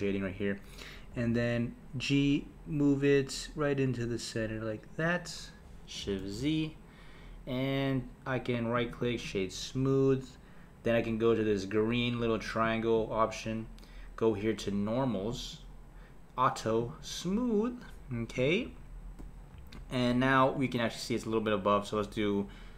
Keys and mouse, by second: 1.1 g, 6.2 shift+z, 8.7-11.8 right drag, 12.6 click, 15.3-16.8 drag, 18.3 click, 19.5 KP_1, 20.5 click.